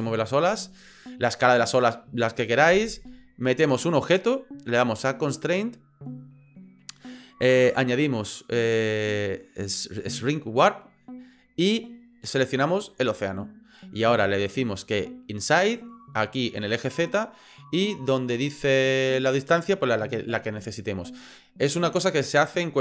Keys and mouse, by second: 3.7 right click.